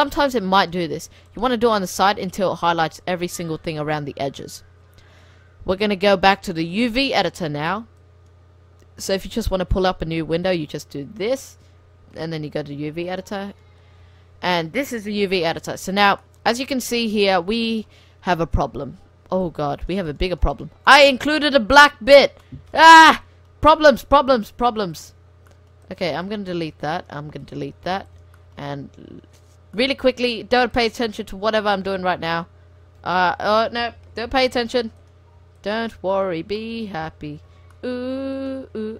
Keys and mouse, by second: 1.3 right click, 2.2-3.2 drag, 3.2-4.9 middle drag, 5.2-8.4 drag, 9.3-12.3 drag, 13.0-14.9 drag, 14.9-15.5 middle drag, 18.9-19.5 middle drag, 19.5-21.1 drag, 20.9-22.6 middle drag, 22.2 click, 22.2 right click, 23.8 middle click, 24.3 x, 25.9 click, 26.2 x, 27.4 x, 28.6 right click, 29.5 middle click, 30.1 click, 30.8-32.2 middle drag, 32.2 h, 33.2 ctrl+z, 33.5 right click, 34.3 f, 35.0-36.2 right drag, 36.0 f, 36.2 middle click, 36.6 middle click, 37.4 ctrl+z, 37.4 click.